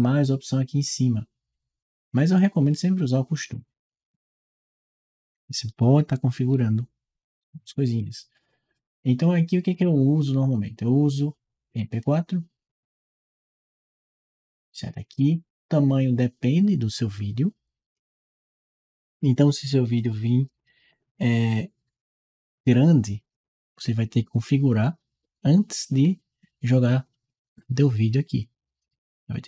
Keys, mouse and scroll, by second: 3.3 click, 12.5 click, 13.1 click, 23.1 click.